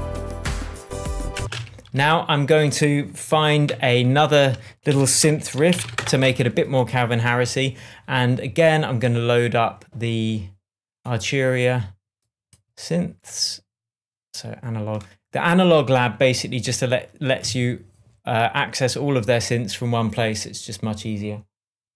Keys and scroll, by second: 1.3 space, 1.6 super+s, 3.7 shift+super+t, 4.9 shift+super+r, 5.2 shift+super+r, 5.3 shift+super+s, 5.3-6.3 typing.